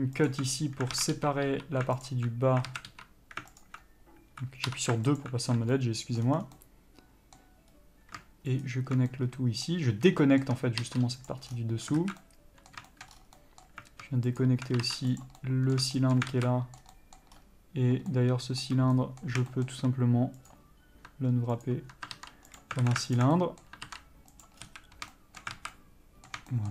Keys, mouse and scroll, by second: 0.5 alt+click, 1.2 alt+a, 1.4 3, 2.3 alt+click, 2.9 alt+a, 3.2 3, 3.9 alt+click, 4.9 2, 5.5 alt+click, 6.0 middle click, 6.5 scroll down 1, 6.8 middle click, 7.9-8.9 scroll up 1, 8.9 alt+shift+click, 9.4 middle click, 10.5 shift+middle click, 11.6 ctrl+e, 11.7 scroll down 1, 12.2 alt+a, 12.5 middle click, 13.1 shift+middle click, 13.4 scroll up 1, 13.6 middle click, 14.7 alt+shift+click, 15.5 ctrl+e, 15.6 middle click, 16.2 shift+middle click, 16.6 alt+a, 17.2 middle click, 17.6-18.3 scroll up 1, 18.3 middle click, 19.7 shift+middle click, 20.6 click, 21.9 ctrl+click, 22.9 ctrl+e, 23.1 alt+a, 23.4 alt+click, 23.6 middle click, 24.7 ctrl+e, 24.8 scroll down 1, 25.1 a, 25.4 shift+middle click, 25.8 alt+a, 26.0 middle click.